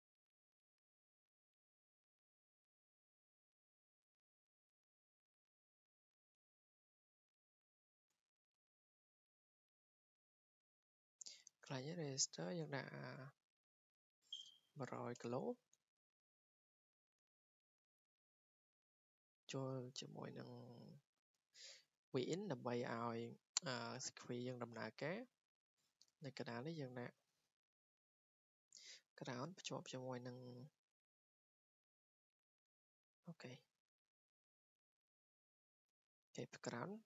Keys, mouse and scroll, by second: 2.0 scroll, 2.2 click, 5.5 click, 6.2 Escape, 8.1 r, 8.5 r, 10.4 click, 10.7 Escape, 11.1-11.5 scroll, 12.5 click, 12.7 click, 12.8 click, 14.1-15.4 typing, 17.0 click, 17.1 Escape, 17.7 w, 18.3 click, 19.0 click, 20.0 click, 20.9 click, 21.5 click, 21.8 Escape, 22.2-22.5 scroll, 24.0 Escape, 24.5-25.1 scroll, 26.8-27.1 scroll down 3, 27.3 g, 28.7 click, 29.5 r, 32.0 click, 32.7 Escape, 34.4 click, 34.8 Escape, 35.5 click, 36.0 Escape.